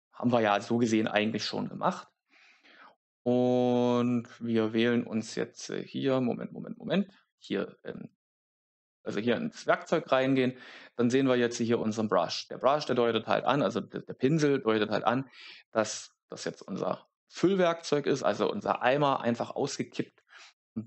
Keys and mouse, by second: 7.3 click.